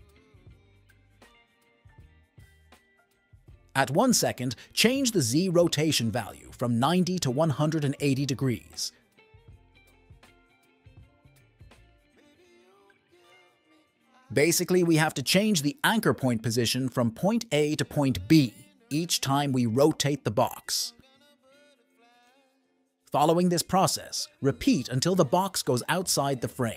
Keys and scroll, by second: 6.4-7.8 typing, 10.5 n, 13.8 F1, 23.0 F1.